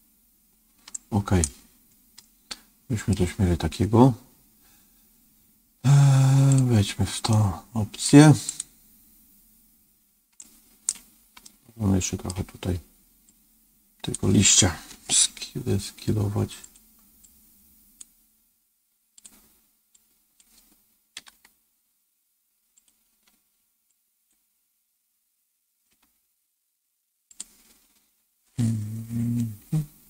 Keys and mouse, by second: 1.0 right click, 2.1 middle click, 6.4 click, 7.2 middle click, 8.4 click, 10.4 right click, 11.4 middle click, 13.3 click, 16.5 s, 17.1-18.1 drag, 18.1 s, 20.0 click, 21.1 g, 24.0-25.8 drag, 25.8 s, 29.5 KP_1.